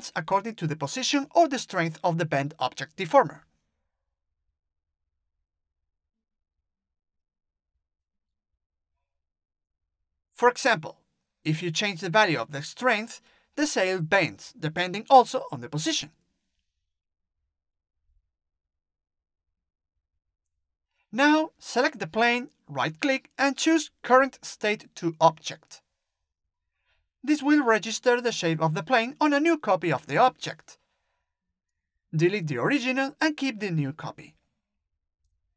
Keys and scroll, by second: 30.4 Delete.